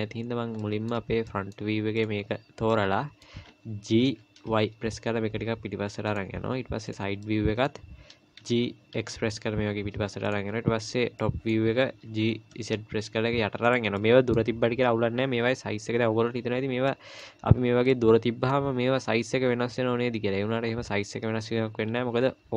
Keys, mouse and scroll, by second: 0.6 middle click, 1.3 middle click, 2.0 click, 2.7 middle click, 4.0 g, 6.9 click, 7.2 middle click, 8.4 g, 10.8 click, 11.2 middle click, 12.1 g, 14.0 middle click, 16.9 middle click, 17.9 middle click.